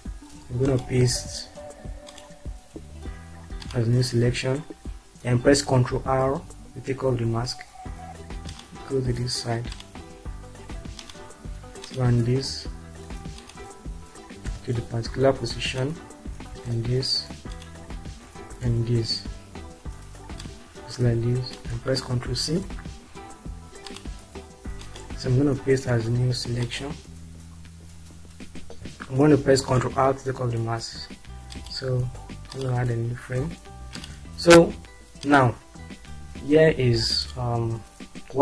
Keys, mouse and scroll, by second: 4.1 click, 4.7 click, 7.0 ctrl+r, 14.4 Down, 15.7 click, 16.6 Right, 17.4 click, 17.8-19.0 drag, 19.0 Up, 22.3 ctrl+c, 29.3 ctrl+r, 31.9 5, 35.5 click.